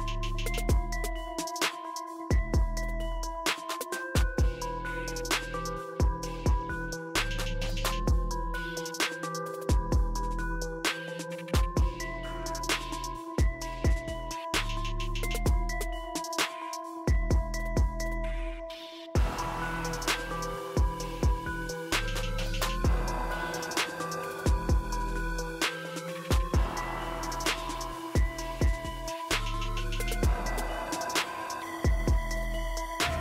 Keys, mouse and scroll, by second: 7.0 click, 9.1 click, 10.8-11.7 drag, 11.7-17.3 drag, 17.9 click, 21.0 click, 22.4 click, 27.0 click, 28.7 click.